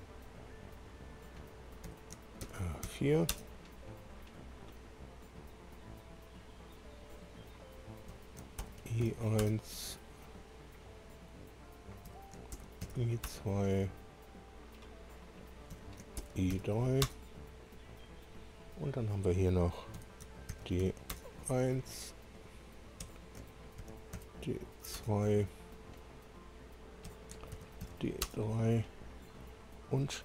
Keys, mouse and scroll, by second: 0.7 click, 1.9 F2, 2.8 shift+r, 3.3 Return, 3.3 4, 4.5 click, 8.1 F2, 8.7-9.6 typing, 10.2 scroll down 1, 11.0 click, 12.1 F2, 12.8 shift+i, 13.2 shift+2, 14.7 click, 15.7 F2, 16.2-17.1 typing, 17.1 Return, 17.7 scroll down 2, 18.5 click, 20.0 F2, 20.6-21.3 typing, 22.2 click, 23.0 F2, 23.8 shift+d, 25.0 Return, 26.1 click, 27.0 F2, 27.8 shift+d, 28.2 shift+3, 29.4 click.